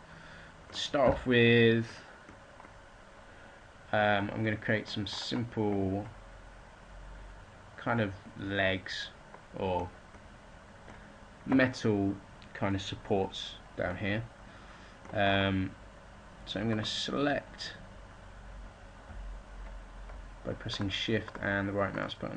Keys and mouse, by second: 0.9 a, 17.3-18.9 middle drag, 18.9 a, 20.0-22.3 drag.